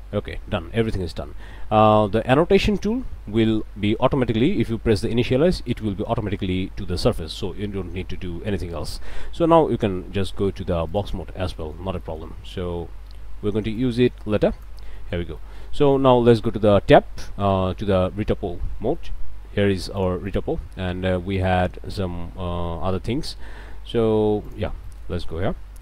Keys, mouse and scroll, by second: 1.8-3.4 middle drag, 10.9 click, 11.5 click, 12.0 shift+click, 13.8-14.8 drag, 14.9 middle click, 15.0 click, 15.4 click, 15.9 click, 16.9 Tab, 17.2 click, 19.0 s, 20.0 click, 21.4 click, 24.5 click, 24.8 middle click, 25.4-25.8 middle drag.